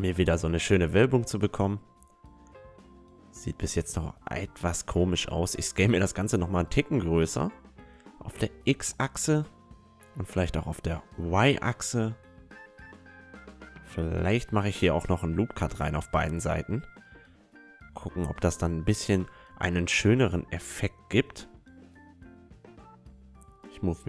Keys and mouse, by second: 0.9-3.1 middle drag, 1.1 Tab, 2.5 Tab, 4.3 s, 9.4 s, 11.7 a, 12.1-14.9 middle drag, 13.4 ctrl+r, 17.3 ctrl+r, 20.3-23.6 right drag, 20.7-22.0 middle drag, 21.0 click, 21.7 s, 22.2-23.6 middle drag, 23.6 s.